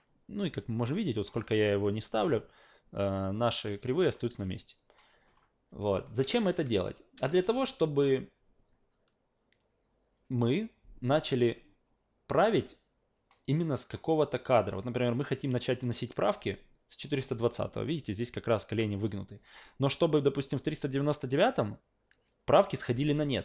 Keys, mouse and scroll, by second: 1.2 click, 1.3 click, 1.5 click, 5.8 alt+middle click, 6.4-6.8 alt+right drag, 14.2-17.0 drag.